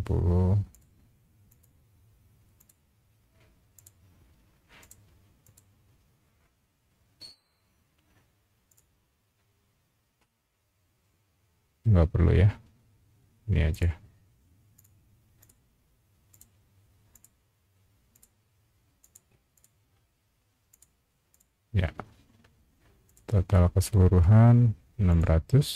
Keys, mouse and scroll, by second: 0.7 click, 1.5 click, 2.6 click, 3.7 click, 4.8 click, 5.4 click, 8.7 click, 13.7 click, 14.7 click, 15.4 click, 16.3 click, 17.1 click, 18.1 click, 19.0 click, 19.5 click, 20.7 click, 21.3 click, 23.0 click, 25.1 click.